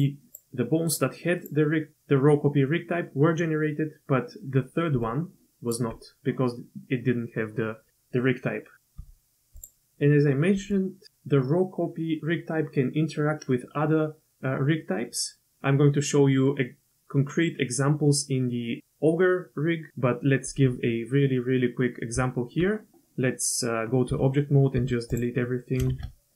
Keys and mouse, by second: 0.3 click, 1.4 click, 4.9-5.9 d, 5.0 click, 9.0 q, 22.1 Tab, 24.1 a, 24.7 x, 25.9 shift+a.